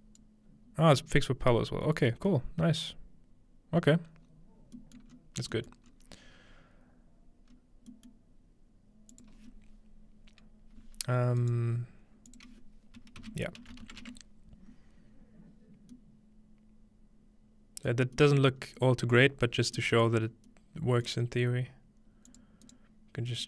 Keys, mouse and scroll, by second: 0.9-2.1 scroll down 1, 2.1-2.8 scroll down 1, 2.8-4.2 middle drag, 4.2-5.1 scroll down 3, 5.0 middle click, 5.1 scroll up 2, 5.7-7.5 middle drag, 5.9 scroll up 1, 7.5 scroll up 1, 7.9-9.2 middle drag, 9.1-10.8 drag, 11.4-13.2 right drag, 12.3-13.9 drag, 13.2-14.4 typing, 15.7-16.8 scroll down 2, 16.0-16.8 middle drag, 16.8-17.7 scroll down 1, 17.9 middle click, 18.4 middle click, 18.6-19.5 scroll up 2, 19.4-19.8 middle drag, 19.5-20.2 scroll down 2, 20.2 middle click, 20.2 scroll up 4, 22.3-23.4 drag, 22.6-23.4 right drag.